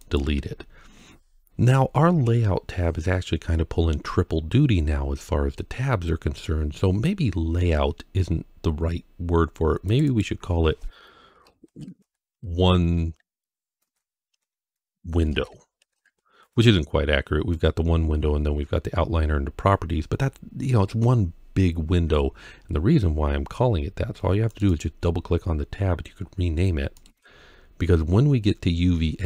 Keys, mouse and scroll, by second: 0.0 right click, 9.7 click, 9.9-16.3 drag, 24.3 click, 24.5-26.8 drag.